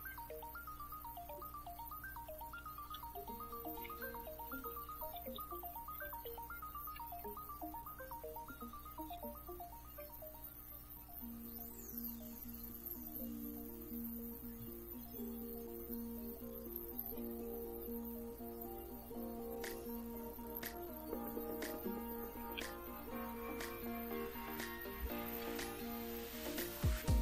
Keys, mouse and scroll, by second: 1.4 click, 2.4-9.7 typing, 11.7 click, 15.5 click, 16.3-16.8 drag, 18.0-18.6 drag, 19.4 click, 20.3-20.6 drag, 20.9 drag, 22.1-25.8 typing.